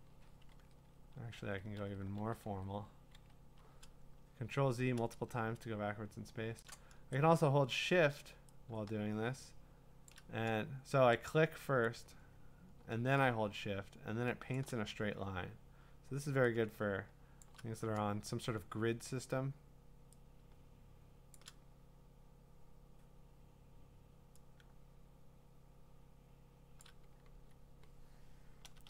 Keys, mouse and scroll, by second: 0.2 ctrl+z, 0.6 ctrl+z, 1.4 ctrl+alt+z, 1.8 ctrl+alt+z, 2.5 ctrl+z, 2.7 ctrl+z, 3.1 ctrl+z, 6.6-27.2 shift+drag.